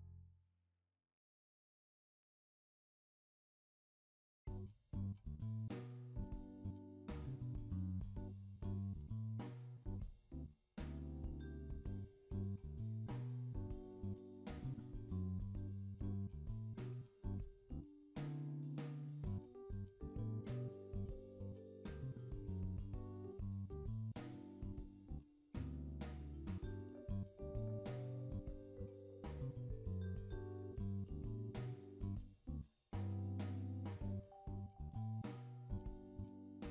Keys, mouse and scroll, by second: 8.3 click, 8.6 k, 13.0 ctrl+z, 13.6 k, 16.4 k, 24.0 k, 30.5 k.